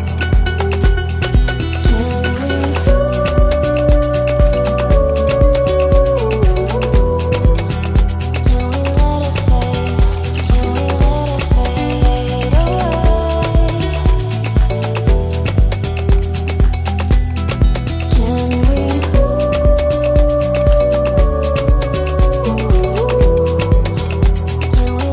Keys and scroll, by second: 21.6 Delete, 22.9 Delete.